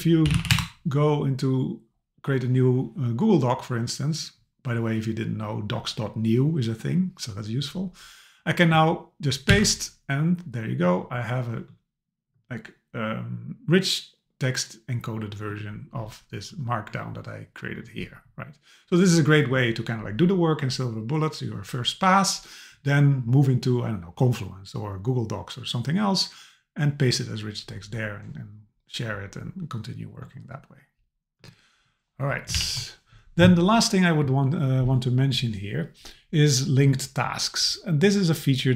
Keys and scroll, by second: 0.5 Return, 9.5 super+v, 32.6 alt+h.